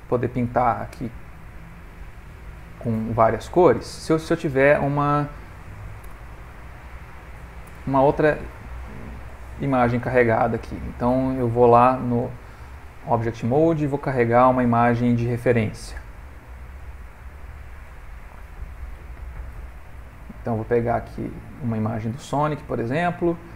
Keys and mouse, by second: 0.1 click, 4.1 shift+middle click, 4.5 ctrl+middle click, 6.1 /, 7.8 /, 8.4 ctrl+middle click, 10.0 shift+a, 12.2 click, 14.1 shift+a.